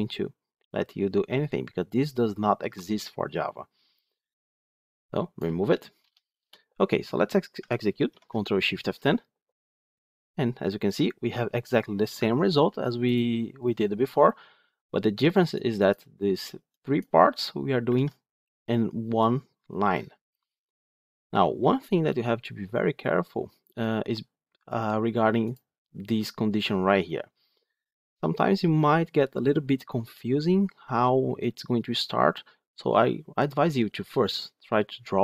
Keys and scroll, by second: 8.0 ctrl+shift+F10, 17.8 ctrl+Tab.